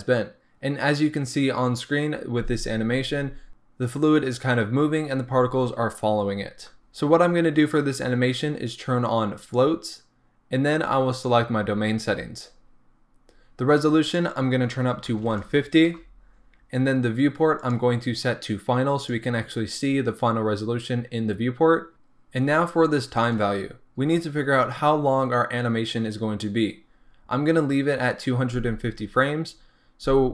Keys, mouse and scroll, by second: 6.8-8.7 scroll up 1, 9.4 click, 11.1 click, 12.4-14.0 scroll down 1, 14.0-30.3 drag, 16.0 Return.